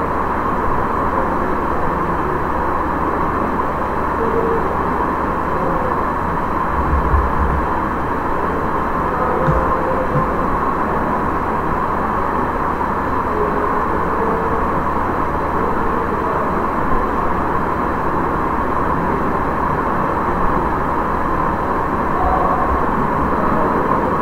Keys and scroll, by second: 6.8 Down, 9.4 space.